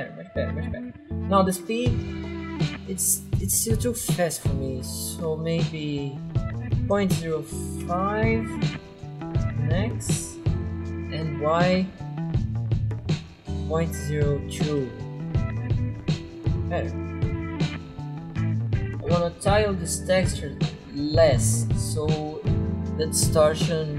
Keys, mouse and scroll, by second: 0.8 click, 6.6-8.0 typing, 10.3 click, 13.7-15.0 typing, 19.4 click.